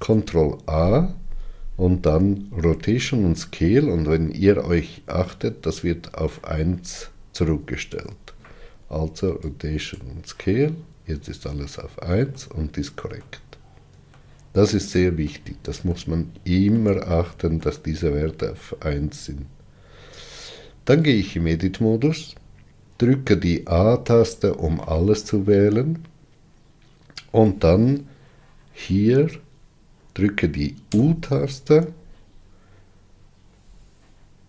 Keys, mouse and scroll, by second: 9.9 ctrl+a, 12.2-20.9 middle drag, 20.9 Tab, 23.6 a.